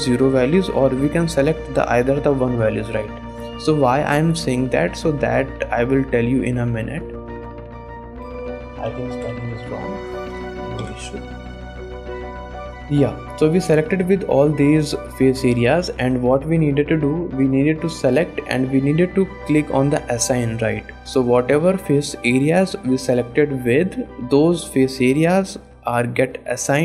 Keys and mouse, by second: 3.7 click, 4.9 click, 5.4 shift+click, 7.1 shift+click, 8.4-11.0 drag, 9.9 Left, 12.9 shift+click, 13.3 middle click, 13.8 middle click, 14.2 middle click, 15.4 middle click, 16.3 shift+click, 16.6 click, 17.0 shift+click, 18.1 click, 20.0 click, 21.4 middle click.